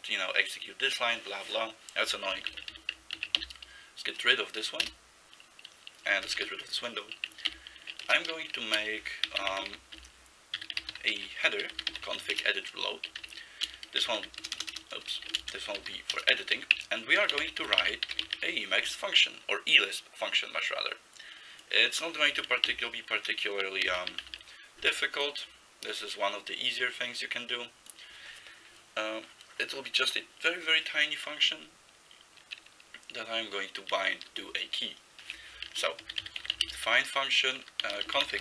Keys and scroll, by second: 2.5 ctrl+x, 2.7 s, 3.2 ctrl+x, 3.4 k, 4.9 Return, 6.3 ctrl+x, 6.4 0, 7.5 ctrl+n, 8.0 Return, 8.4-18.9 typing, 22.7 ctrl+n, 23.9 ctrl+c, 24.2 ', 35.6-38.4 typing.